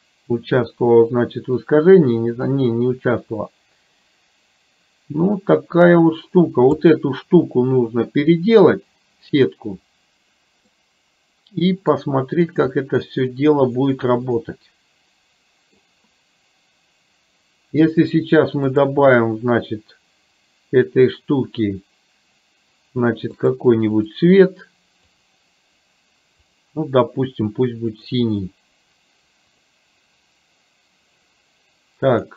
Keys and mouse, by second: 2.9-5.8 drag, 6.9 click, 10.8-12.0 middle drag, 12.8-15.9 middle drag, 19.9 click, 23.5 click, 24.2 click, 25.2 click, 26.7 click, 30.2 click, 32.2 click.